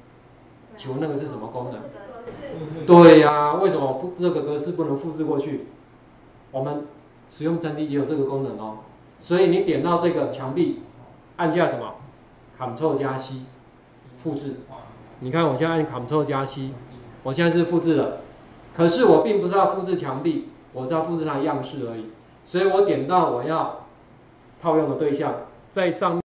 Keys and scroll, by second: 16.4 ctrl+c.